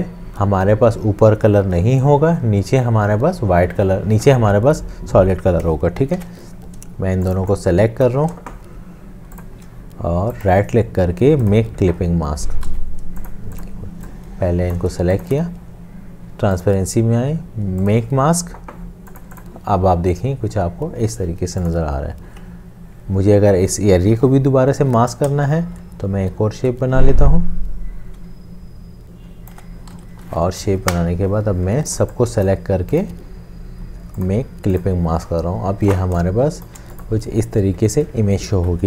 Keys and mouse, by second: 6.2 ctrl+z, 9.5 shift+click, 10.5 right click, 12.9 ctrl+z, 15.2 shift+click, 24.6 l, 25.4 shift+click, 26.0 space, 27.2 shift+click, 29.5 shift+space, 29.9 v, 31.6 Left, 32.9 right click, 36.3 shift+click.